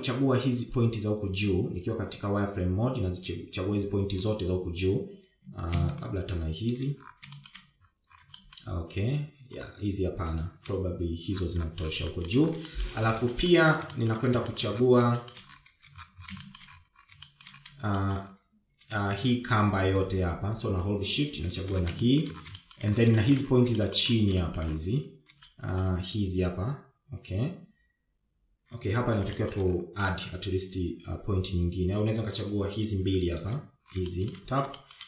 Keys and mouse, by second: 1.4 shift+z, 2.5-6.0 drag, 7.8 shift+click, 9.1 shift+middle click, 10.1 shift+middle click, 13.8 shift+middle click, 14.4 shift+middle click, 15.1 shift+middle click, 15.7 shift+middle click, 16.3 shift+middle click, 16.9 shift+middle click, 18.2 shift+middle click, 19.0 shift+middle click, 19.7 shift+middle click, 20.6 shift+z, 20.9 shift+z, 22.7 shift+click, 23.8 shift+middle click, 24.3 shift+middle click, 24.9 shift+middle click, 25.5 shift+middle click, 26.2 shift+middle click, 27.2 shift+middle click, 31.1 shift+middle click, 34.3 shift+click.